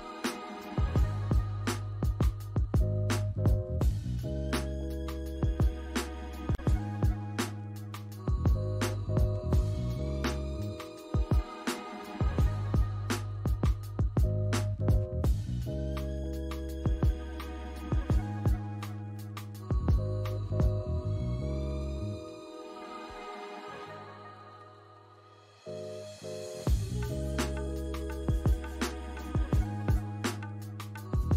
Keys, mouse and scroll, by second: 1.4-1.7 scroll down 3, 1.7 alt+click, 4.5 right click, 6.0-6.4 scroll up 2, 13.3 double click, 13.6 scroll down 1, 13.9 alt+click, 15.7-16.2 alt+scroll down 2, 16.2 alt+middle click, 16.6 alt+click, 17.8 scroll up 1, 19.6 alt+click, 20.4 right click, 22.0 alt+click, 25.3 Escape, 25.6 scroll down 1, 26.3 alt+middle click, 26.6 scroll down 1, 27.3 alt+middle click, 27.6 alt+click, 28.1 alt+middle click, 28.7-29.2 alt+scroll up 2, 28.8 alt+middle click.